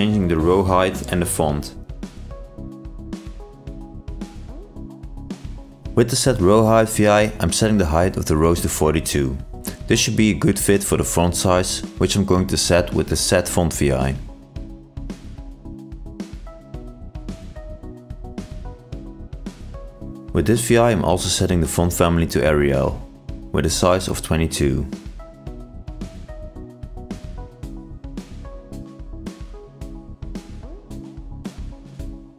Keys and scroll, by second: 4.3 ctrl+e, 5.0 ctrl+space, 8.6 ctrl+shift+i, 17.8 ctrl+space, 18.6 ctrl+shift+i.